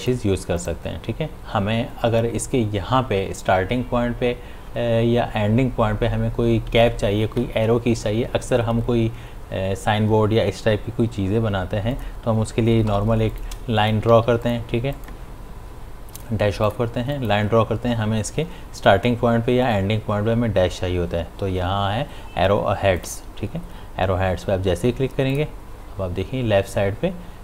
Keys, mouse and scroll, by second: 0.0 click, 11.9 click, 12.9 p, 13.3 click, 14.2 v, 14.5 click, 23.0 click, 25.3 click.